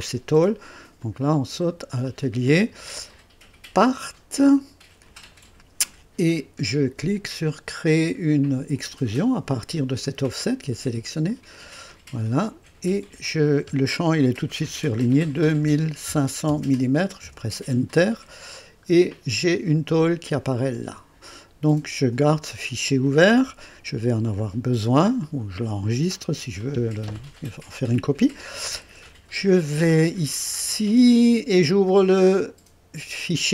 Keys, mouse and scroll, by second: 1.0 click, 3.8 click, 11.3 click, 15.2 KP_2, 15.6 KP_5, 16.1 KP_0, 17.2 Return, 18.5-19.0 scroll down 1, 19.1-22.5 drag, 19.1 typing, 21.9-22.4 typing, 23.7 scroll down 1, 23.7 typing, 24.3 right click, 28.7 click.